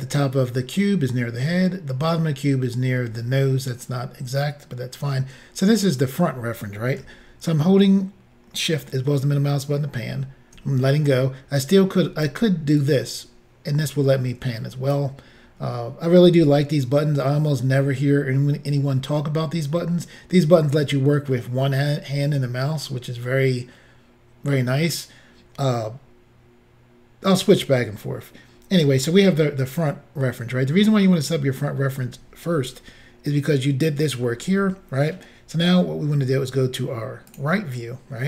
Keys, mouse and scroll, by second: 8.9 shift+middle click, 12.8 click, 37.3 click.